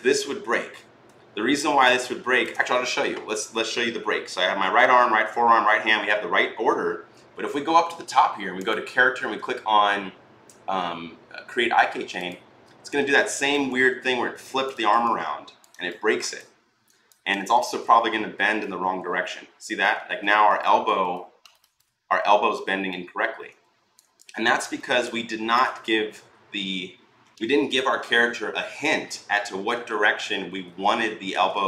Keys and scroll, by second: 17.3-18.2 typing, 19.9 ctrl+z, 25.5 ctrl+z, 25.9 ctrl+z, 30.1 ctrl+z, 30.4 ctrl+z.